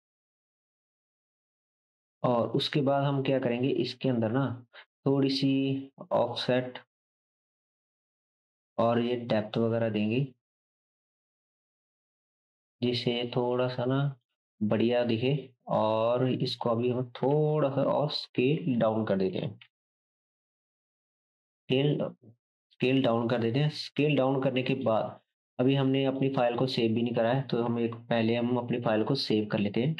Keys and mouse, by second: 5.7-10.6 shift+drag, 15.1-21.1 drag, 17.3 s, 19.7 ctrl+s, 19.7 ctrl+right click, 21.1-21.4 ctrl+right drag, 21.4 ctrl+s, 21.4-24.4 ctrl+drag, 27.2 click.